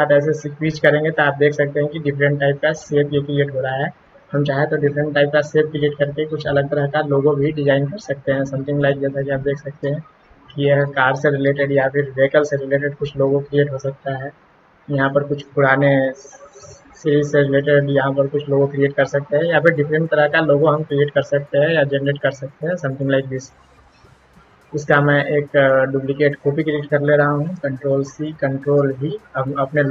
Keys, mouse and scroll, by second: 8.8-9.8 shift+drag, 11.6-21.7 shift+drag, 22.8 shift+click, 24.1 shift+click, 25.6 click, 27.6 ctrl+c, 28.1 click, 28.9 ctrl+v.